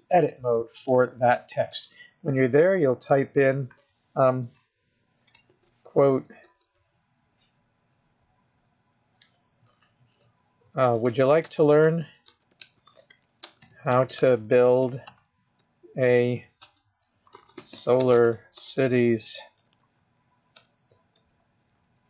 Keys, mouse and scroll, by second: 0.1 click, 2.8-3.2 BackSpace, 3.3 BackSpace, 5.7 shift+", 6.7 shift+s, 9.5 BackSpace, 11.0-15.8 typing, 15.3 Return, 16.9-22.0 typing.